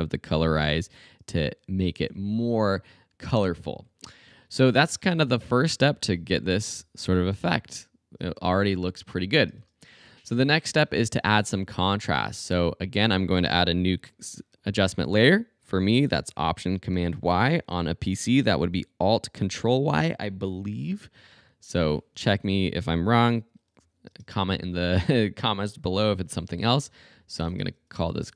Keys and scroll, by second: 0.4 2, 1.6 super+a, 1.7 super+3, 1.8 0, 2.0 Home, 4.7 space, 9.6 space, 13.9 alt+super+y, 22.3 Return, 23.2-24.2 typing, 27.1-28.3 typing.